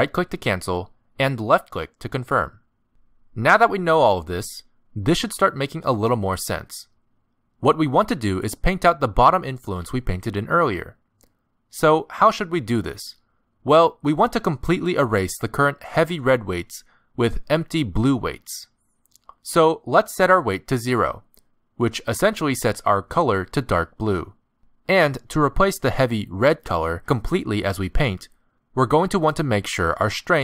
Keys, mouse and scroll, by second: 0.6 f, 2.0 f, 7.0 middle click, 15.5 middle click, 19.1 click, 21.0 middle click, 22.1 middle click, 24.9 click, 28.0 click.